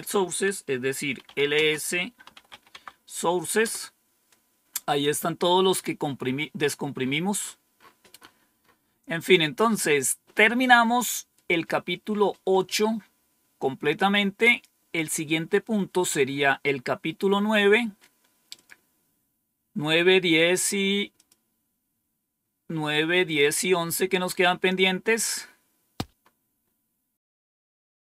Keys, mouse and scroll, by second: 0.9-2.9 typing, 3.5 Return, 6.9 scroll up 1, 9.6 click, 9.6 typing, 14.4 click, 18.5 click, 21.1 click, 22.3 scroll down 2, 22.8 scroll down 2, 23.5-24.1 scroll down 3, 24.5-25.3 scroll down 2, 25.6-26.6 scroll down 5.